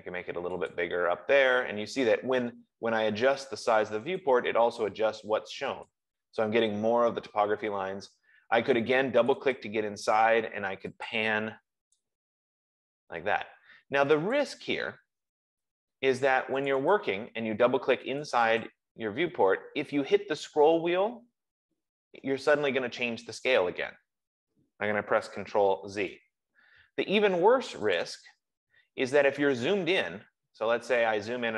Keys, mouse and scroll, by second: 1.1 click, 4.5 click, 6.2 click, 9.6 click, 9.8 click, 11.5 click, 14.5 click, 15.6 Escape, 17.1 click, 17.3 click, 18.8 click, 19.1 click, 21.9 scroll, 24.8 scroll, 26.3 ctrl+z, 28.5 click, 28.6 click, 30.0-31.0 scroll.